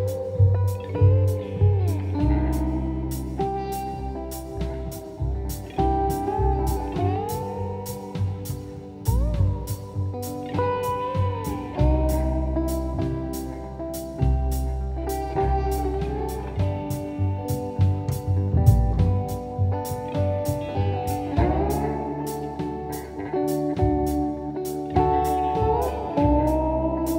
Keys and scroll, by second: 1.1 p, 5.4 F1, 6.1 ctrl+d, 8.3 F1, 8.5 F2, 10.7 F1, 13.7 F1, 13.8 F2, 19.7 F1, 20.1 F2.